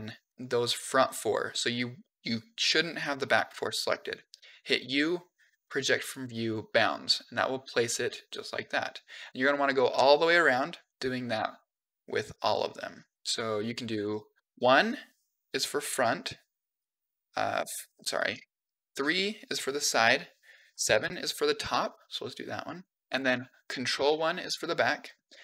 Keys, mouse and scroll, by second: 0.3 shift+middle click, 0.3 click, 0.9 middle click, 1.8 middle click, 3.4 KP_1, 4.6 u, 8.6 middle click, 9.7 KP_3, 10.7 click, 11.6 u, 12.6 middle click, 14.3 KP_1, 16.6 KP_2, 17.4 KP_5, 18.1 KP_5, 18.8 KP_3, 20.5 KP_7, 22.2 click, 23.0 u, 23.8 ctrl+KP_1, 24.9 click, 25.2 u.